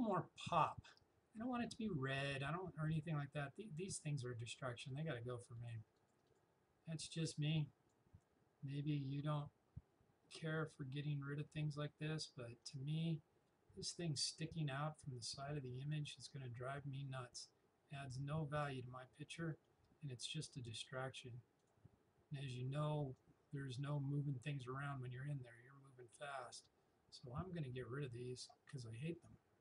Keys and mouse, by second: 4.8-10.5 drag, 12.7-19.5 drag, 19.5 right click, 20.8-29.2 drag, 29.2 right click.